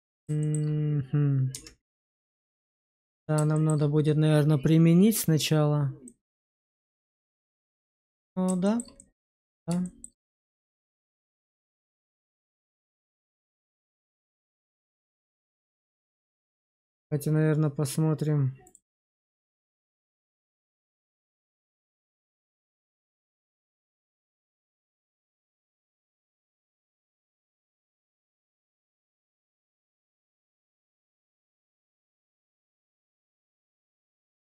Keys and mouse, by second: 0.3 shift+middle click, 1.4 Tab, 2.0 shift+middle click, 2.4-3.3 middle drag, 3.4 shift+middle drag, 6.0-8.4 middle drag, 8.5 shift+middle drag, 8.9-9.4 alt+middle drag, 9.7 shift+middle drag, 13.2-14.4 middle drag, 16.2 q, 18.5 click, 19.3 Tab, 19.8 shift+middle click, 20.4 alt+middle click, 21.2 shift+z, 21.6 shift+middle click, 22.0 Tab, 23.5 alt+q, 24.0 click, 26.2 click, 28.6 click, 30.1 click.